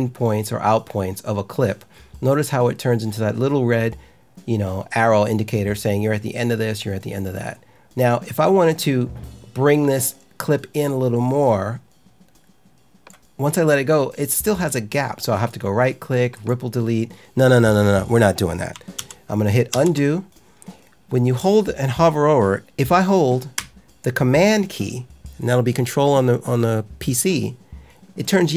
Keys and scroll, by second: 18.9 super+z.